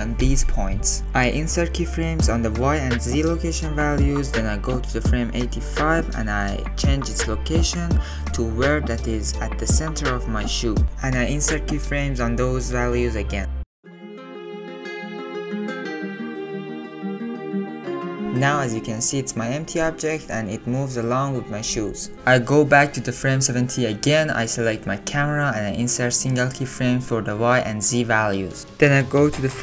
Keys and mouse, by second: 0.1 ctrl+z, 0.6 ctrl+z, 2.8 click, 3.5 click, 6.5 click, 7.8 alt+click, 8.3 alt+click, 8.8 shift+click, 9.8 g, 14.2 g, 15.6 click, 15.8 click, 16.2 middle click, 16.9 Left, 17.1 Right, 17.4 Left, 17.5 Right, 17.7 Right, 17.7-18.2 drag, 17.9 middle drag, 19.0-19.4 drag, 20.5 drag, 21.0-23.8 drag, 24.6 click, 25.7 click, 27.5 click, 28.2 click.